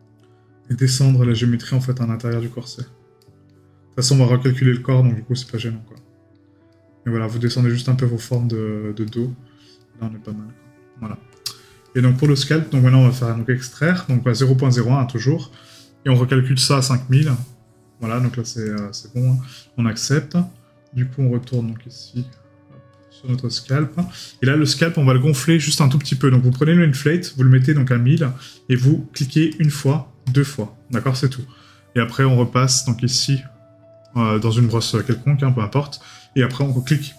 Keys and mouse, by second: 3.2 right click, 5.9 right click, 11.9 right click.